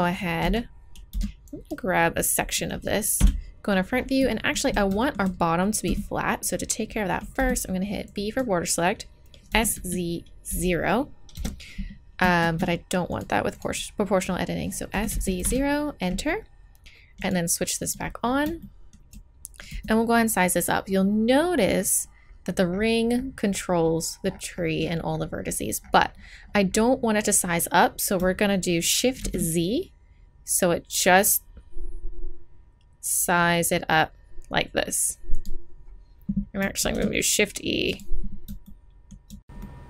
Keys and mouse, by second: 0.5 z, 1.1 b, 1.7 click, 3.2 KP_1, 5.9 a, 7.4 b, 9.5 s, 12.5 ctrl+z, 14.9 s, 17.2-22.3 drag, 19.7 s, 36.9 shift+e, 38.7-39.8 drag.